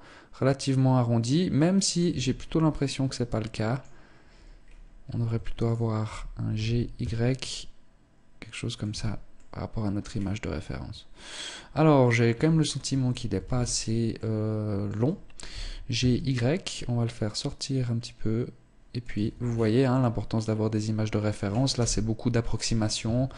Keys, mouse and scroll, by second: 1.5 Tab, 1.8 scroll up 3, 2.2 middle click, 4.1-4.4 scroll up 1, 5.0 alt+shift+right click, 6.0 g, 8.3 Tab, 8.3 click, 8.8 middle click, 9.4 scroll down 5, 10.0 middle click, 12.3 Tab, 12.8 a, 13.0 a, 13.6 middle click, 14.9 g, 18.6 Tab, 18.9-19.3 scroll down 6, 19.3 middle click, 21.2 KP_0, 22.0 scroll up 1, 22.6 ctrl+s.